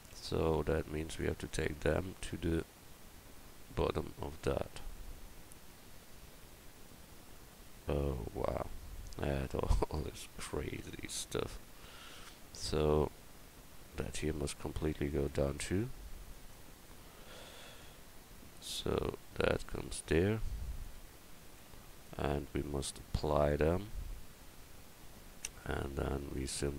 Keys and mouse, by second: 0.1 Tab, 1.2-3.3 drag, 4.0 Tab, 14.2 Tab, 14.8 Tab, 15.3 Tab, 21.6 Tab, 24.2 Tab.